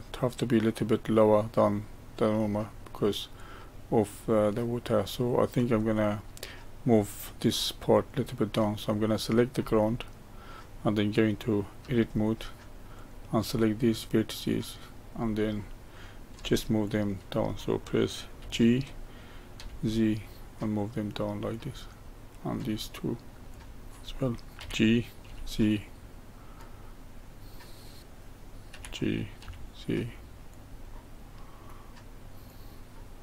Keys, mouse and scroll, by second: 2.6-7.9 middle drag, 7.9 click, 11.8 Tab, 12.9 click, 13.5-16.5 middle drag, 16.9 shift+click, 17.5 middle click, 18.4 g, 22.6 click, 23.5 shift+click, 24.6 g, 27.0-28.0 middle drag, 28.0 click, 28.7 g, 30.9-32.5 middle drag, 32.5 click.